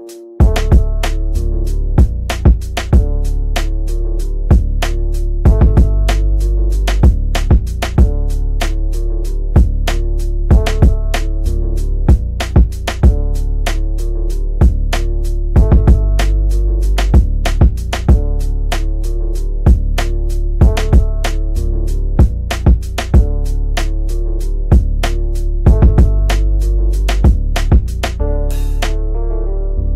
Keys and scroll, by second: 1.0 ctrl+v, 18.8 Delete, 22.3 Delete, 25.4 Escape.